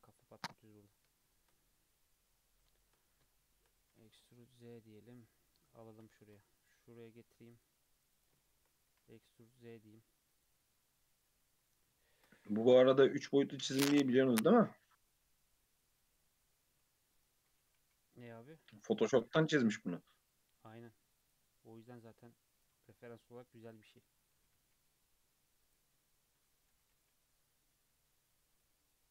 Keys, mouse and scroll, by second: 0.0 click, 0.3-1.8 scroll up 7, 1.3 shift+middle drag, 2.3-2.9 scroll down 3, 3.3-3.8 shift+middle drag, 3.8 e, 5.8 shift+middle click, 6.2 ctrl+r, 8.1 click, 8.5 shift+middle click, 8.9 e, 12.1 ctrl+r, 14.2 1, 14.6 click, 15.0 x, 17.1 click, 17.6 g, 19.3 shift+click, 19.8 g, 22.6 click, 22.9 g, 24.4 g, 26.7 g.